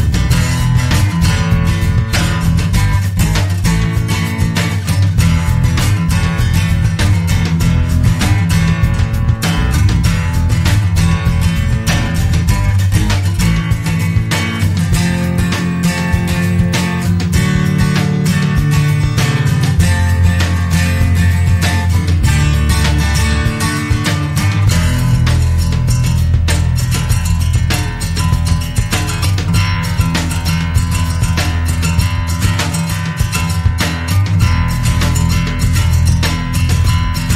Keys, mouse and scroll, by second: 1.7 click, 3.0 click, 3.9 2, 4.4 0, 5.9 click, 7.1 click, 11.1 click, 12.6 click, 15.2 click, 16.5 click, 18.8 click, 20.8 click, 23.9 click, 24.8 click, 26.8 click, 28.1 1, 28.8 0, 29.4 scroll down 2, 30.2 scroll up 2, 30.9 click, 32.4 click, 33.1 click, 34.5 click, 35.6 4, 36.0 5, 36.9 click.